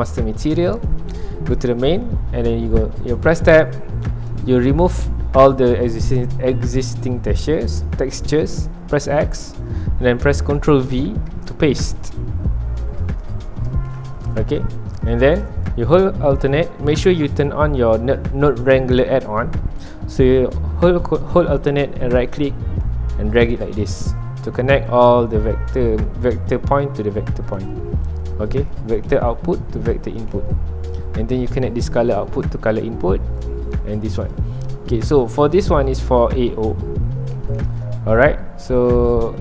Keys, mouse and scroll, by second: 9.1 x, 13.2 ctrl+v, 16.5 click, 25.4-30.8 alt+right drag, 30.8-32.2 scroll up 2, 32.2 scroll up 1, 32.4-36.6 drag, 36.6-37.5 scroll up 2, 37.5-38.2 scroll up 1, 38.2-38.8 scroll up 1, 38.8-39.4 scroll up 1.